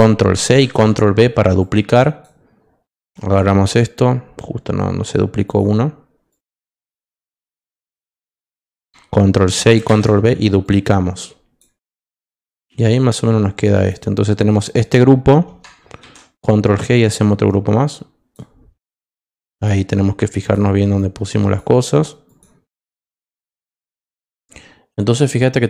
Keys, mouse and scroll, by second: 0.3 ctrl+c, 0.5 ctrl+v, 1.6 click, 2.9 click, 5.4 click, 6.3 click, 7.8 click, 9.9 ctrl+v, 10.6 click, 12.1 click, 13.7 click, 14.6 click, 16.0 ctrl+g, 17.4 click, 19.5 click, 20.4 click, 20.9 click, 22.2 click.